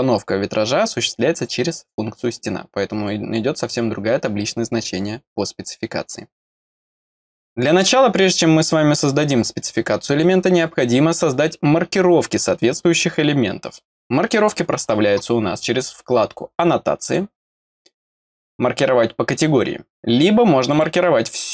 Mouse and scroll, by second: 17.0 click, 20.7 click.